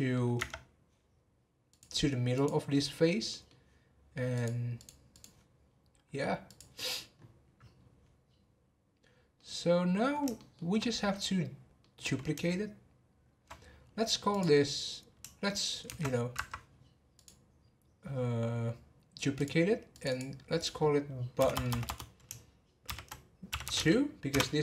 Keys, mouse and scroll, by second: 0.3 Tab, 1.7 click, 3.3-4.3 middle drag, 4.3-6.6 drag, 7.8 scroll down 1, 9.3-13.8 middle drag, 13.8-14.3 scroll up 1, 14.3 click, 17.1 click, 19.4 click, 19.9 click, 21.5 BackSpace.